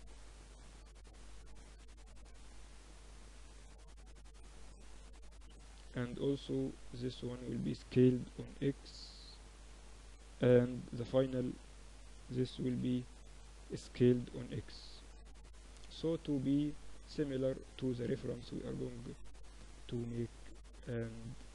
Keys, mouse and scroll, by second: 0.5 z, 0.9 Tab, 2.0 Tab, 2.3 Tab, 3.3 Tab, 3.7 Tab, 4.1 Tab, 5.3 ctrl+r, 5.7 click, 7.2 s, 9.1 a, 10.2 z, 10.5 a, 11.3 a, 11.6 b, 13.0 s, 14.5 z, 14.9 Tab, 17.3 middle click, 19.0-21.1 middle drag, 19.5 Tab, 20.2 Tab.